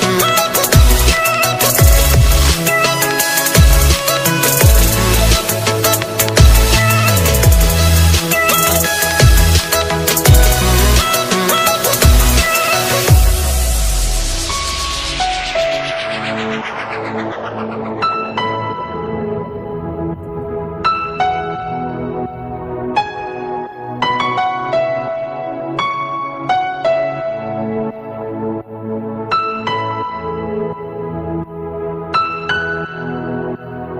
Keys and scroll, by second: 31.1 ctrl+space, 32.8 alt+space, 33.5 ctrl+space.